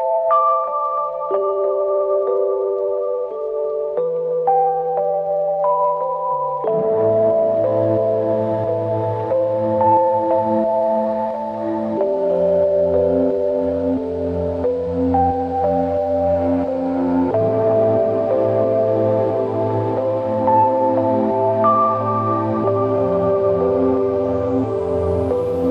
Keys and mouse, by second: 0.7 double click, 3.2 alt+m, 4.6-5.5 typing, 9.7 typing, 12.1 r, 17.5 shift+click, 19.7 alt+click, 23.9 ctrl+alt+click, 24.5 alt+click.